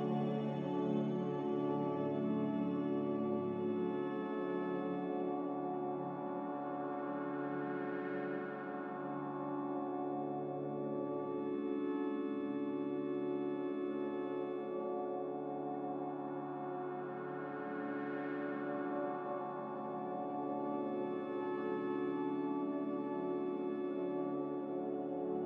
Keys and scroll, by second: 6.7 z, 8.4 typing, 16.1-16.9 typing.